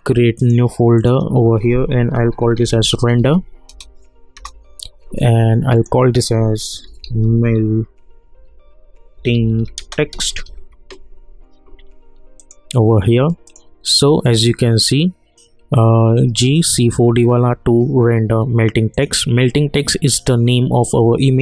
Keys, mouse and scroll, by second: 0.4 click, 2.0-3.7 typing, 5.7 click, 6.6-10.9 typing, 12.4 click, 18.9 click.